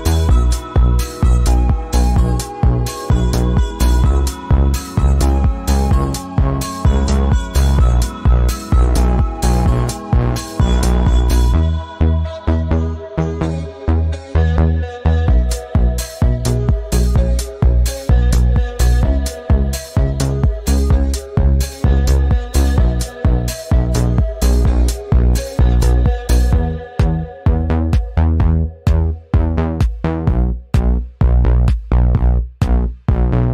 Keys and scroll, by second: 2.2 i, 3.5 v, 5.4 i, 6.9 v, 8.7 i, 10.7 v.